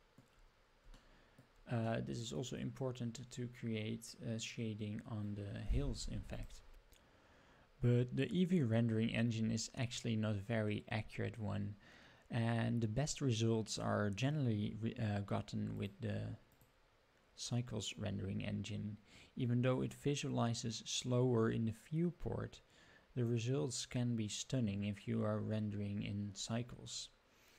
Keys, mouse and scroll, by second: 1.0-1.5 shift+middle drag, 1.9 middle click, 3.4-3.8 scroll up 2, 3.8 scroll down 2, 9.3-12.6 scroll up 5, 15.9 click, 16.5-23.6 drag.